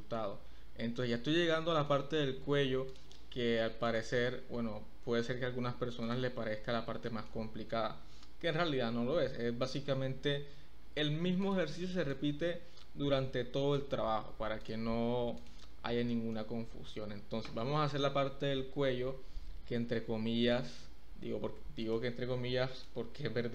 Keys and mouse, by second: 1.8 shift+middle click, 3.0 middle click, 3.9 middle click, 6.1 click, 7.0 shift+click, 8.0 e, 8.3 z, 9.6 click, 11.4 click, 12.1-13.7 drag, 15.3 click, 16.1 ctrl+click, 18.4 e, 19.1 z, 20.4 click, 21.8 click, 22.7 click.